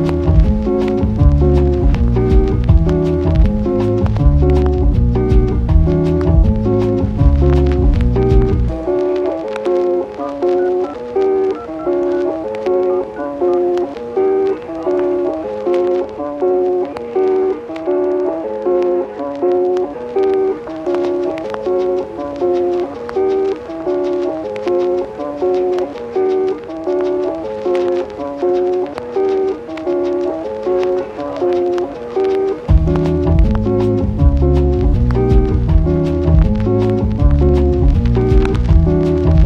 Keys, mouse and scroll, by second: 0.3 shift+a, 6.1 click, 10.0 click, 10.6 shift+a, 13.4-15.8 typing, 14.8 click, 16.1 click, 17.2 g, 17.5 y, 19.4 click, 20.9 click, 22.4 shift+click, 22.7 shift+click, 22.9 shift+click, 26.3 click, 27.4 click, 28.0 click, 29.7-31.8 drag, 32.8-33.9 drag, 36.3 click, 37.0 click.